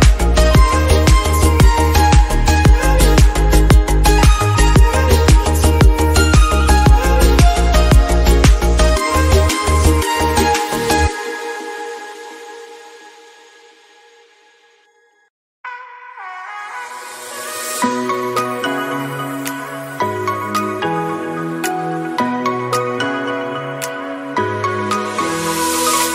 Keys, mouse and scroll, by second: 0.3 scroll up 1, 1.2 click, 1.3 click, 3.7-4.2 middle drag, 4.2 click, 4.8 click, 9.5 scroll down 2, 11.2 click, 13.6-14.1 drag, 14.1-14.5 scroll down 1, 14.9 drag, 17.0 scroll up 6, 17.5 scroll down 1, 19.2 middle click, 19.4 scroll up 3, 19.6-20.0 drag, 20.3-20.8 drag, 23.4-23.9 drag, 24.2 click, 24.8 Delete, 25.5 click.